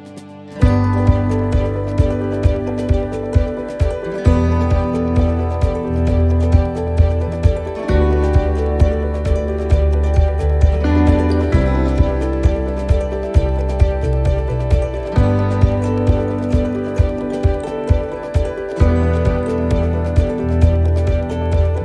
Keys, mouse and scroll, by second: 0.5 alt+shift+right click, 1.0 middle click, 3.0 click, 3.6 middle click, 4.8 alt+shift+right click, 5.3 alt+shift+right click, 5.6 middle click, 6.3 ctrl+z, 7.3 ctrl+z, 7.4 middle click, 7.7-8.3 scroll down 3, 8.5 middle click, 9.7 middle click, 10.5 middle click, 10.8-11.1 scroll up 1, 11.3 shift+middle click, 11.5 shift+middle click, 11.7 right click, 12.6 l, 14.0 click, 14.6 shift+middle click, 15.4 right click, 16.7 middle click, 16.8-17.6 scroll down 11, 17.7 middle click, 18.2-18.5 scroll up 4, 18.6 shift+middle click, 19.3 scroll down 1, 19.6 shift+middle click, 20.0-20.5 scroll up 1, 20.5 right click, 20.5-20.8 scroll up 2, 21.4 l.